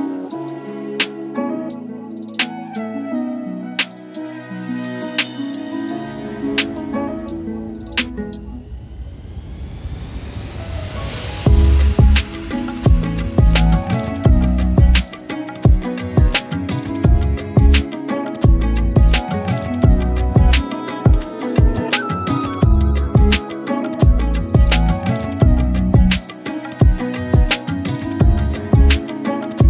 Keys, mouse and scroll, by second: 0.3 alt+z, 0.9 scroll down 1, 1.0 click, 1.1-1.4 middle drag, 1.4-2.0 scroll up 11, 2.0-2.7 scroll down 11, 2.9 click, 3.6-4.3 middle drag, 4.4 click, 6.0 ctrl+a, 6.4 click, 7.2 click, 7.7-8.7 drag, 8.7 middle click, 9.3-9.7 drag, 10.7 Tab, 12.1 r, 13.5 middle click, 14.5 g, 17.2 Tab, 17.3-17.8 scroll up 5, 17.8 click, 18.1-18.4 scroll down 4, 18.4 click, 19.1 middle click, 20.1 click, 21.0 click, 21.4 scroll up 3, 21.6-22.4 middle drag, 22.8 scroll down 1, 23.0 click, 23.4 KP_1, 23.7 shift+middle click, 24.8 KP_7, 24.9 z, 25.6 Tab, 25.7-27.0 scroll up 17, 26.0 shift+middle click, 26.3 shift+middle click, 26.6 shift+middle click, 27.0 click, 27.8 shift+middle click, 28.9 KP_1, 29.1-29.5 scroll down 36, 29.5 shift+middle click.